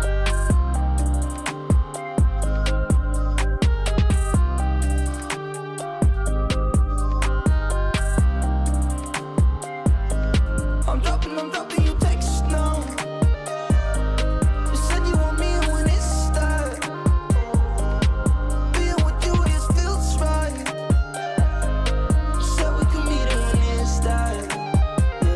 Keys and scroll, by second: 14.8 ctrl+space.